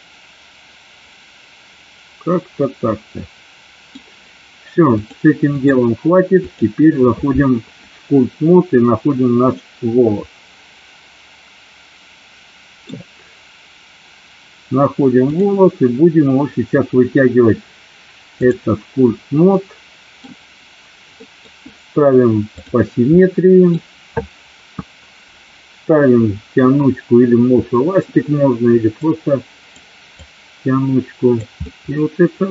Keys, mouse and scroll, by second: 5.1 click, 6.6 click, 9.7-12.9 middle drag, 15.4-18.8 drag, 19.6 middle click, 21.3 middle click, 23.3 middle click, 29.2 click, 30.3-31.4 drag, 31.7-32.5 middle drag.